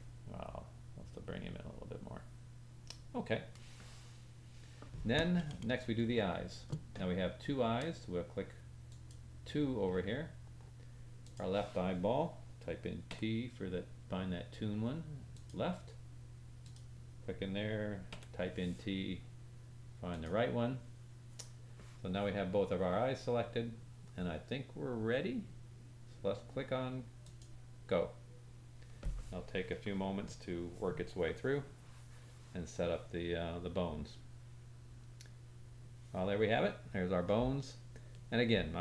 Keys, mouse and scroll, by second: 0.5 click, 9.1-11.2 drag, 9.8-11.2 scroll down 3, 16.6 click, 27.2 click.